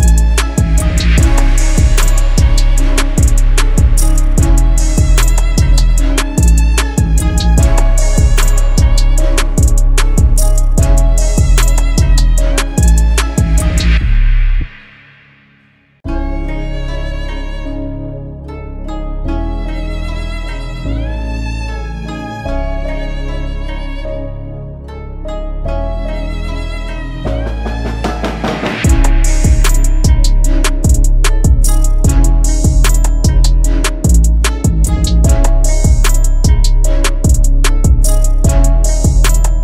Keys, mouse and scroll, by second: 10.9 typing, 23.5 double click, 31.7 double click.